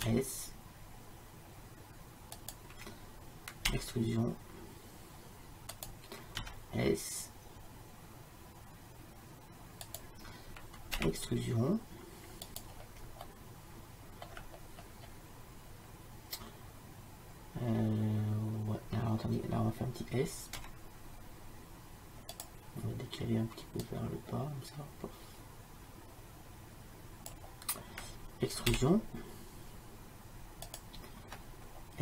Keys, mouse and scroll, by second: 0.1 s, 3.8 e, 6.5 s, 11.0 e, 13.3 middle click, 16.0-20.7 middle drag, 20.7 s, 23.9-25.7 drag, 28.8 e.